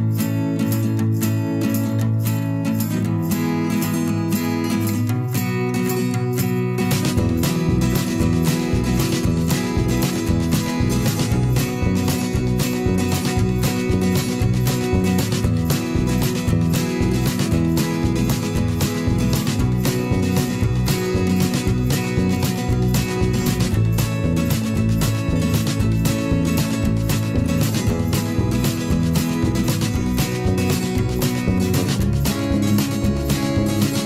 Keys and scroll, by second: 11.9 v, 13.9 t, 18.2 shift+f, 19.0 shift+i, 19.4 shift+d, 28.8 n.